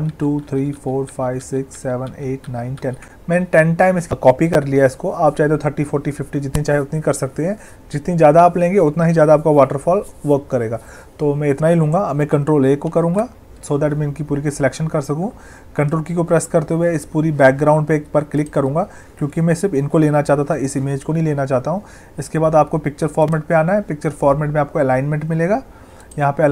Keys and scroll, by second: 12.8 ctrl+a.